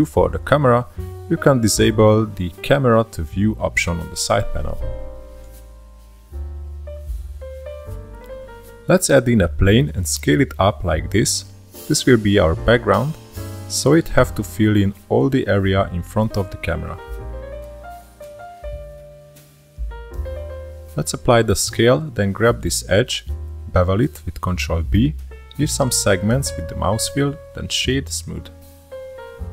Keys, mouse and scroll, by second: 1.6-3.7 drag, 3.7-6.7 shift+middle drag, 6.7-7.1 drag, 7.1 scroll down 2, 7.3 shift+a, 9.6-11.0 drag, 11.0 s, 12.0-12.8 shift+middle drag, 12.8 KP_0, 13.2 click, 13.5 e, 15.5 Tab, 16.0 click, 17.4 middle click, 17.7 Tab, 17.9 2, 18.0 shift+click, 18.9 click, 19.8-22.1 drag, 22.1 Tab, 22.7 ctrl+a, 24.8 Tab, 25.4 click, 26.5 ctrl+b, 29.3-29.5 right drag.